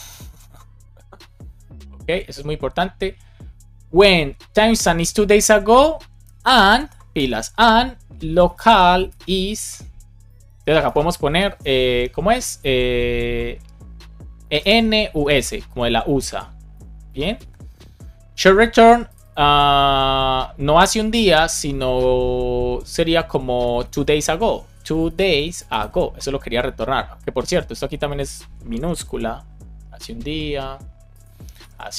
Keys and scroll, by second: 7.0 space, 7.5 space, 8.9 space, 10.8 space, 11.3 Left, 14.7-17.7 typing, 23.4 Left, 23.7 alt+shift+Right, 24.7 space, 25.3 space, 28.6 BackSpace, 31.5 BackSpace.